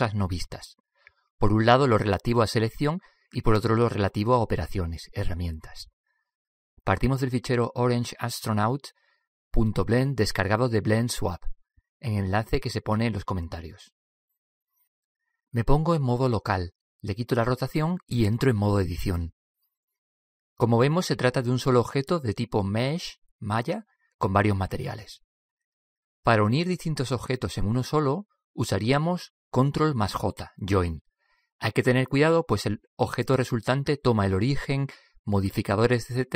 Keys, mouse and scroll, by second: 17.5 KP_Divide, 19.0-20.6 drag, 20.7 click, 25.8 click.